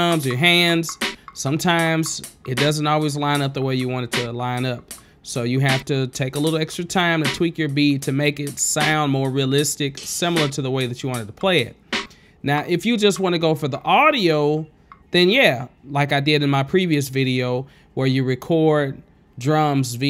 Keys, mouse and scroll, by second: 0.0 click, 4.3 q, 5.9 click, 7.6 click, 8.1 click, 8.3 click, 8.5 click, 9.0 click, 9.1 ctrl+space, 17.9 click, 19.8 space.